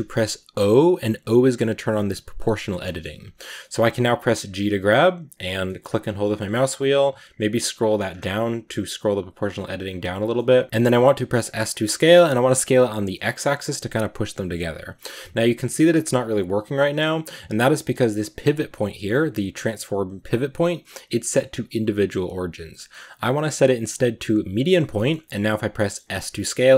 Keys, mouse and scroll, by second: 0.4 o, 2.7-4.4 middle drag, 4.4 g, 10.2 middle click, 10.6 s, 11.6 s, 24.7 scroll up 1, 24.8 middle click, 25.4 scroll down 1, 25.6 middle click, 26.0 s.